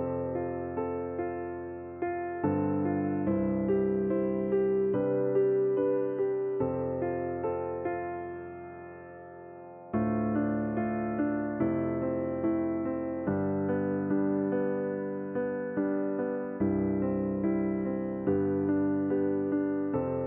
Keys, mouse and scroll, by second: 0.1 r, 2.4-3.5 middle drag, 3.5-5.1 drag, 5.6-7.1 scroll up 3, 7.1 shift+click, 7.6 shift+click, 8.5-10.4 middle drag, 10.4 g, 12.4 Tab, 12.7 click, 13.2 scroll down 2, 14.6 click, 15.1 click, 15.5-15.8 scroll down 3, 15.8-16.1 shift+middle drag, 16.1-16.5 scroll up 3, 16.5-19.0 middle drag, 20.0 click.